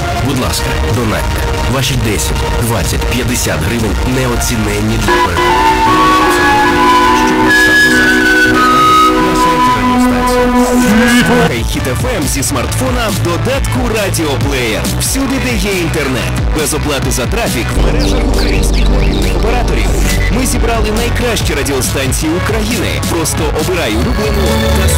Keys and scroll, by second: 12.2 Page_Down.